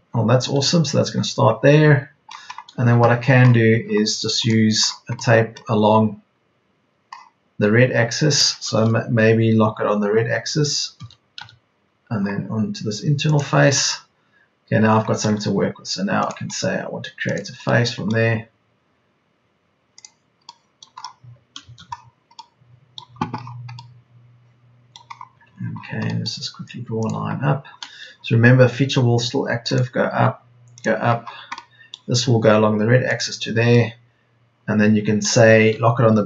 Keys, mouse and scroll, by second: 2.7 Escape, 10.9 Left, 11.3 Right, 15.8 Escape, 18.6 Escape, 21.1 Escape.